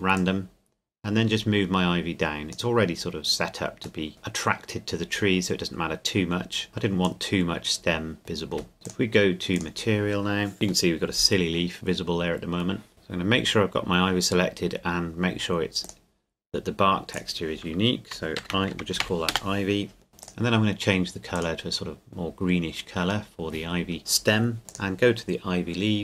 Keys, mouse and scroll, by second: 0.1 click, 3.1-4.1 scroll up 1, 4.1 KP_Decimal, 4.3 middle click, 6.7-7.1 scroll up 1, 7.1 click, 8.6 shift+middle click, 8.7 scroll up 2, 8.8-10.5 drag, 10.9-12.9 middle drag, 15.8-18.1 drag, 18.4-19.0 typing, 19.3 Return, 20.2-23.6 drag, 24.7 click.